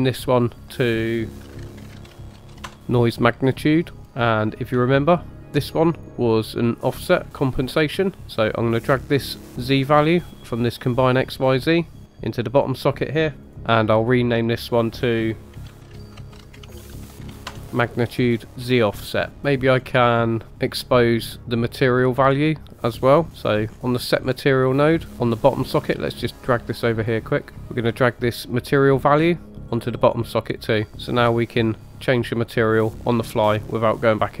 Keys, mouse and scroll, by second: 0.2 click, 0.4-2.7 drag, 4.8-7.3 shift+drag, 8.0 middle click, 8.8 click, 9.9 click, 13.4 click, 14.6-17.6 drag, 24.6 middle click, 25.7 click, 27.5 typing, 28.5 drag.